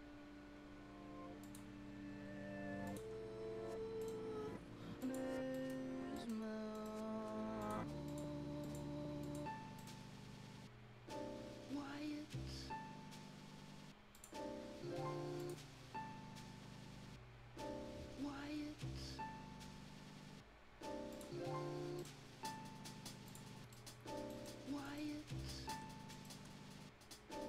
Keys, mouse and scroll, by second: 1.4 click, 1.7 click, 1.7 scroll up 1, 2.8 click, 3.1-3.5 scroll down 1, 3.9 scroll up 1, 4.0 right click, 4.3-4.6 scroll down 1, 5.0 click, 5.3 scroll up 1, 5.5 right click, 5.9 scroll down 1, 6.1 right click, 6.3 scroll up 1, 6.7 middle click, 7.6 click, 9.6 scroll down 1, 9.7 right click, 10.2-11.7 scroll up 1, 14.1 click, 14.4 scroll up 1, 15.3 click, 21.1 click, 21.3-21.9 scroll down 1, 21.9 right click, 22.5 scroll up 1, 23.2 click, 23.7 right click, 24.0 scroll up 1, 24.2 right click, 24.6 scroll up 1, 24.8 middle click, 25.7 Escape, 25.8 scroll up 1, 26.1 middle click.